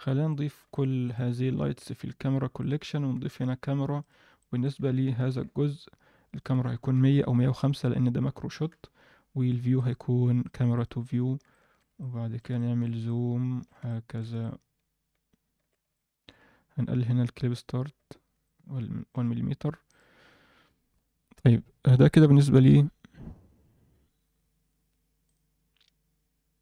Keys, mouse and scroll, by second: 0.7 shift+click, 1.0 shift+click, 1.7 m, 3.2 shift+a, 4.3 alt+middle drag, 5.2 ctrl+alt+KP_0, 6.2-7.6 drag, 7.1 KP_0, 8.7 n, 9.7 click, 10.4 click, 10.7 click, 10.9 n, 11.4 shift+middle drag, 11.9-12.3 ctrl+alt+middle drag, 12.6 alt+shift+middle drag, 13.0-13.6 ctrl+middle drag, 13.9 alt+shift+middle drag, 14.4-15.7 ctrl+middle drag, 15.9 alt+shift+middle drag, 17.1 click, 18.4 ctrl+middle click, 25.3 click.